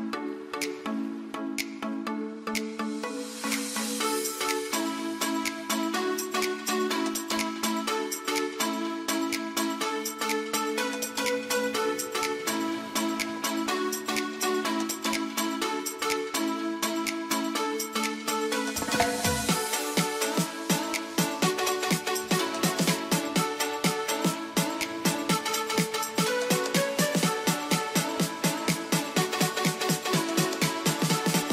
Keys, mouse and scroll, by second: 21.5-25.2 drag, 26.5 right click, 27.1 click, 28.9-31.5 typing, 30.9 Return.